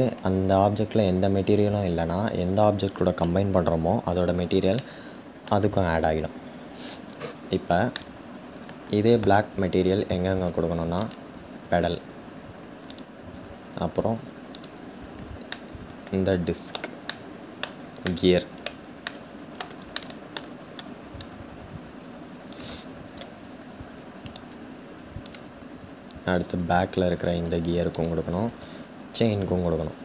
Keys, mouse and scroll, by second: 4.5-6.0 middle drag, 6.0-7.6 scroll down 3, 7.6-10.7 shift+middle drag, 10.7 shift+click, 15.3-20.9 middle drag, 21.1 click, 24.1-25.9 drag, 25.9-27.6 scroll up 7, 29.3-30.0 scroll down 5.